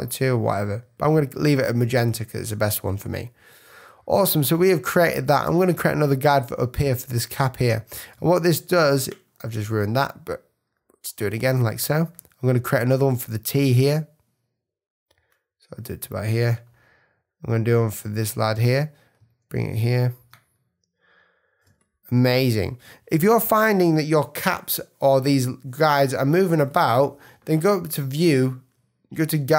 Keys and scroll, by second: 8.1 space, 8.7 super+z, 19.2 space, 21.6 space.